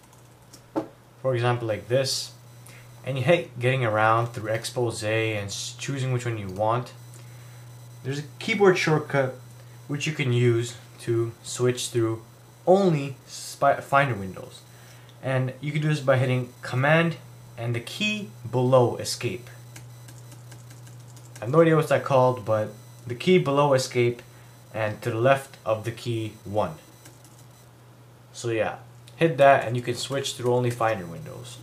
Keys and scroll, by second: 19.8 super+`, 27.1 super+`.